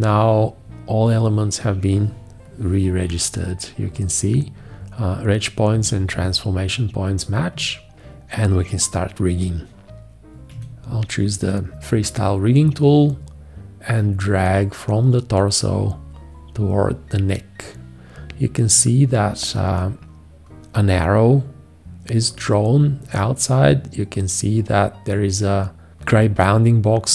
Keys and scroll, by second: 10.5 F4.